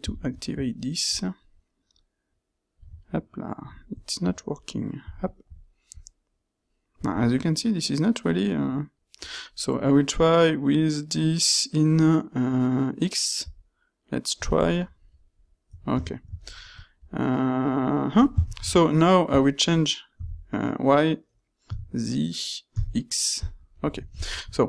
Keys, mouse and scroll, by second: 14.5 ctrl+middle click, 14.9 ctrl+middle click, 15.3 ctrl+middle click, 18.5 ctrl+shift+q, 23.7-24.5 middle drag.